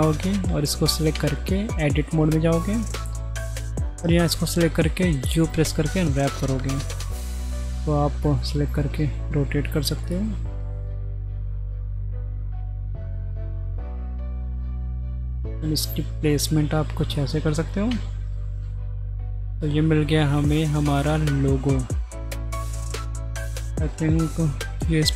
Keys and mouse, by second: 0.1 middle drag, 1.5 Tab, 2.8 a, 4.7 u, 7.0 r, 11.4 r, 14.3 g, 17.1-17.5 middle drag, 17.9 Tab, 18.8 click, 19.4 middle click, 20.3-21.5 middle drag, 24.6 g.